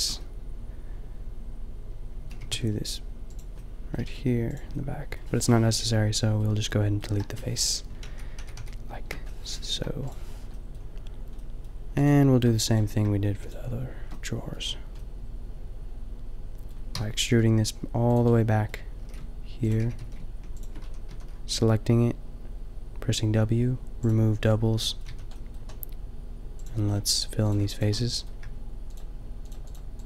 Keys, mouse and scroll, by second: 0.1 middle click, 1.8 middle click, 2.4 g, 4.0 g, 4.8 middle click, 7.1 Delete, 8.0 ctrl+z, 8.4 ctrl+z, 8.5 ctrl+z, 9.7 Delete, 13.8 shift+middle click, 14.4 shift+middle click, 15.1 shift+middle click, 16.9 e, 17.3-18.7 drag, 17.6 g, 19.0-21.3 typing, 25.1 a, 26.5-28.0 drag, 28.0-30.0 middle drag.